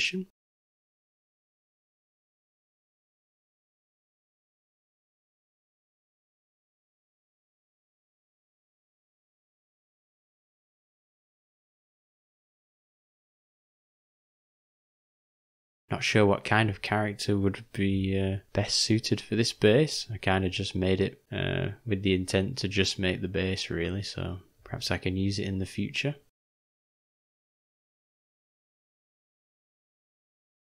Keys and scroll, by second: 3.0 s, 12.5 h, 16.1 ctrl+z, 18.9 g, 22.2 ], 26.4 /.